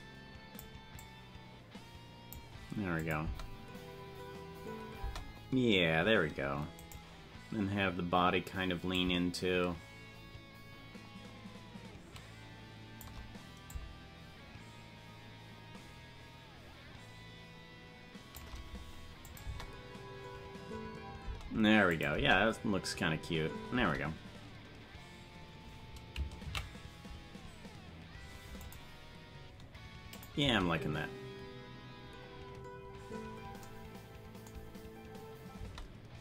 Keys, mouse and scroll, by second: 0.9-2.3 drag, 3.0 click, 3.2 space, 7.0 right click, 7.0 space, 8.9-13.0 shift+drag, 13.6-18.4 shift+drag, 19.3 click, 19.4 space, 21.4 space, 21.9 click, 22.1 space, 23.9 space, 29.6 ctrl+s, 30.2 click, 30.3 space, 32.1 scroll down 2, 33.6 scroll down 12, 35.6 space.